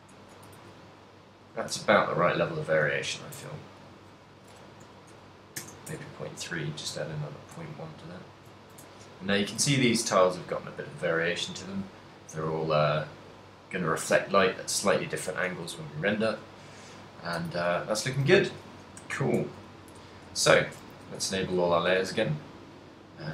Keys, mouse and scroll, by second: 0.7 Tab, 1.0 middle click, 1.0 a, 1.9 middle click, 2.5 ctrl+middle click, 2.7 ctrl+middle click, 2.9 middle click, 3.5 Tab, 3.9 middle click, 4.5 g, 6.0 Tab, 6.4 middle click, 7.0 a, 7.2 middle click, 7.6 a, 7.9 middle click, 8.6 ctrl+middle click, 9.0 shift+middle click, 9.3 middle click, 9.7 ctrl+middle click, 10.1 middle click, 12.4 middle click, 15.2 middle click, 15.9 ctrl+middle click, 16.9 middle click, 17.6 a, 18.1 a, 18.5 a, 20.5 a, 20.5 shift+1, 21.1 a, 21.5 ctrl+middle click, 22.2 a, 22.5 middle click.